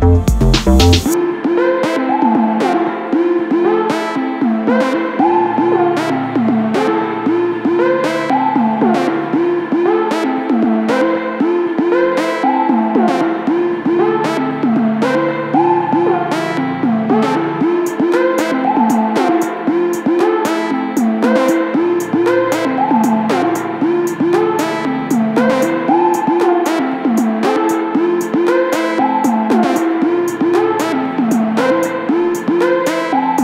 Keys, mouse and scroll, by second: 0.8-3.4 drag, 5.6 click, 8.0 click, 9.6 click, 10.6 click, 12.1 click, 13.6 click, 20.0 click, 23.0-25.9 middle drag, 27.1-33.1 middle drag.